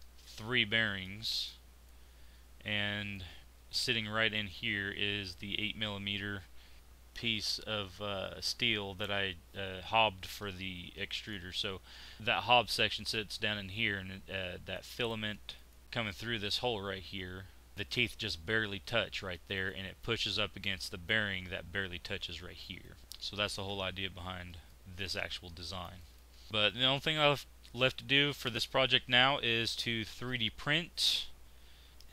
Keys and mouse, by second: 2.2 middle click, 12.1-14.8 middle drag, 15.8 middle click, 26.5 x.